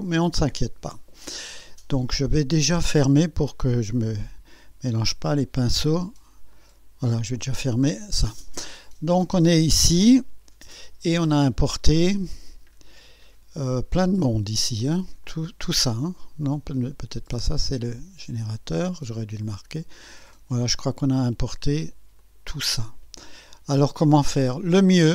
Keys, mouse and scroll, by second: 4.2 click, 6.5 click, 8.2 scroll down 2, 8.7-9.0 scroll down 2, 15.2 click, 18.2 click, 19.4 click, 20.9 shift+click, 22.2 shift+click.